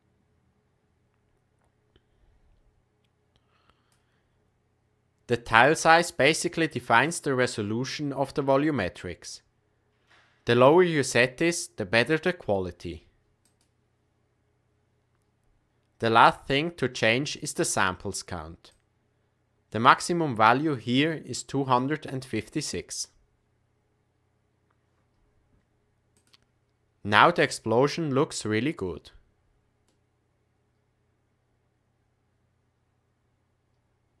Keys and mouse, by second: 6.6-13.8 drag, 18.7-21.4 drag, 26.1 click, 26.7-34.2 middle drag.